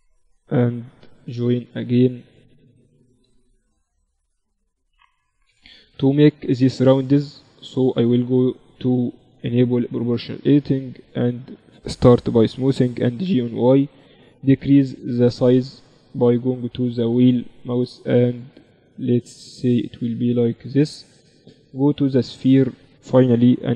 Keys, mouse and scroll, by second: 0.7 j, 3.0 j, 5.3 j, 6.2-8.8 right drag, 8.4 middle click, 12.8 g, 21.8-23.6 drag, 23.4 g.